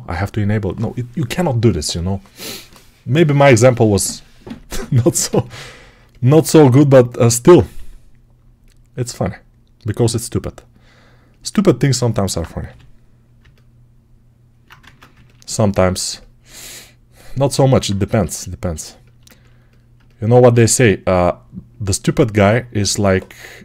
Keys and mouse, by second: 6.3 shift+d, 7.6 s, 10.6-11.9 drag, 11.9-13.2 alt+right drag, 12.5 g, 13.2-17.4 alt+middle drag, 14.7 ctrl+Tab, 17.4-19.2 alt+drag, 19.2-23.6 ctrl+alt+right drag.